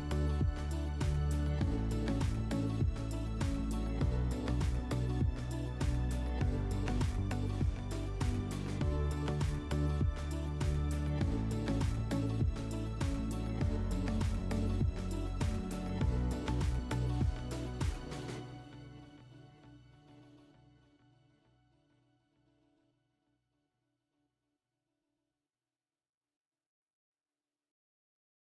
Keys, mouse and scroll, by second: 1.0 click, 2.2 middle click, 7.6 click, 11.3 click, 12.2 click, 15.0 click, 16.1 click, 17.5 click, 18.1 click, 19.9 click, 22.1 click, 22.4 click, 26.4 click.